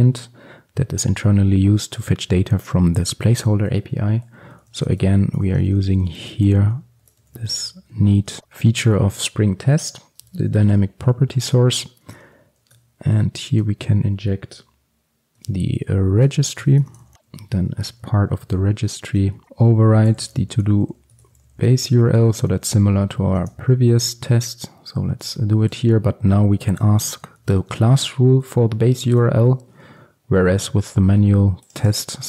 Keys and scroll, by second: 12.3 Return, 16.9 Return, 26.9 Return, 29.5 ctrl+x.